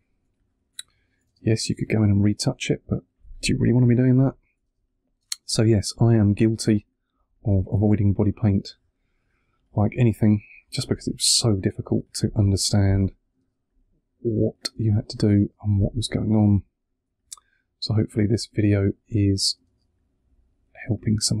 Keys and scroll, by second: 1.2 space, 3.1 2, 4.6 space, 5.7 2, 12.4 space, 14.6 space, 16.9 2, 18.2 space, 19.5 space, 20.7 2.